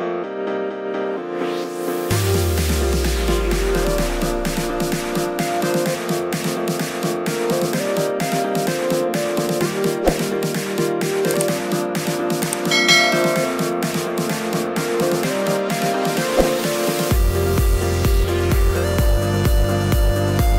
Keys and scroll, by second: 0.8-3.9 typing, 5.0 Return, 10.3 2, 11.3 0, 14.1 Return, 17.7 Return.